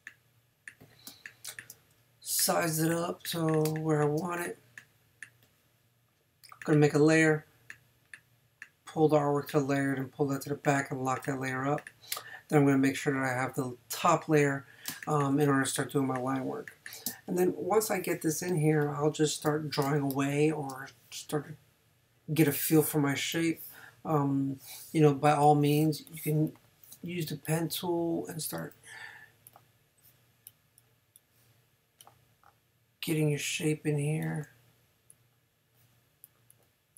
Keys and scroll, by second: 1.1 space, 2.0 shift+space, 3.6 shift+space, 14.9 space, 18.5 space, 19.8 space, 25.8 space.